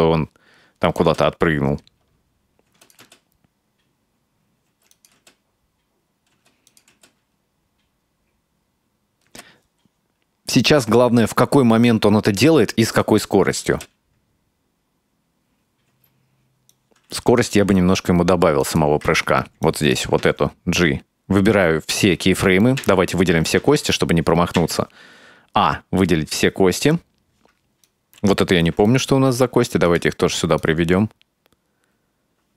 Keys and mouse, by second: 1.1 space, 2.7 space, 2.9 click, 3.1 space, 4.8 space, 5.0 click, 5.2 space, 6.4 space, 6.7 click, 7.0 space, 9.3 space, 13.0 click, 13.7 space, 16.0 space, 16.7-17.3 right drag, 17.6 g, 19.3 ctrl+z, 19.7-20.1 right drag, 20.1 f, 20.2 z, 22.9 a, 23.7 alt+a, 24.6 a, 26.3-27.4 drag, 27.5 right drag, 28.7 g, 30.6-32.5 drag.